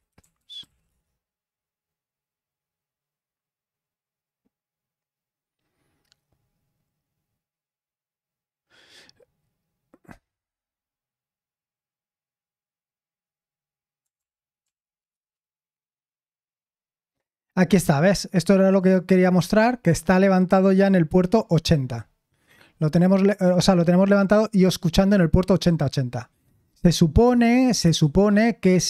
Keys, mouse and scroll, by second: 0.0-1.4 typing, 14.1 ctrl+p, 14.6 ctrl+p, 15.1 Return, 18.7-19.9 drag, 24.3 click, 26.8 super+7, 27.2 super+8, 27.8 super+9.